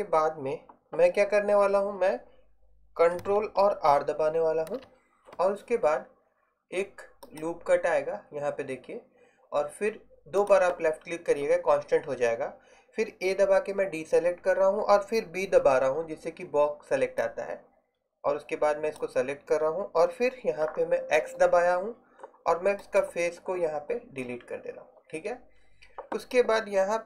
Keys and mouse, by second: 4.7 ctrl+r, 13.4 a, 15.7 b, 21.3 x.